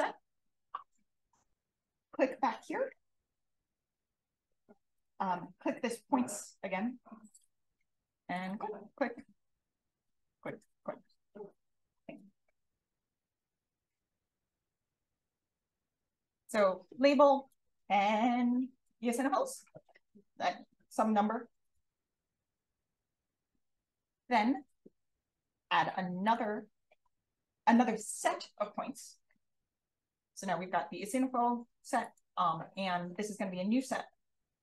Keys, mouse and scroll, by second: 1.7-8.9 drag, 10.2 click, 10.8 click, 26.2 click, 32.0 click.